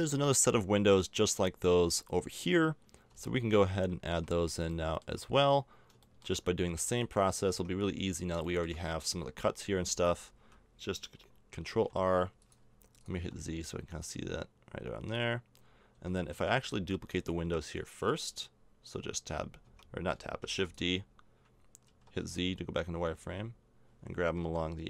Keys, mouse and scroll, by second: 3.1 z, 3.5 z, 4.1 a, 6.5 z, 7.5 Tab, 9.1 z, 9.6 z, 11.7 ctrl+r, 13.2 z, 15.9 z, 16.3 Tab, 16.6-18.3 right drag, 18.3-19.3 middle drag, 19.2 Tab, 19.6 Tab, 20.4 shift+d, 22.2 z, 24.4 g.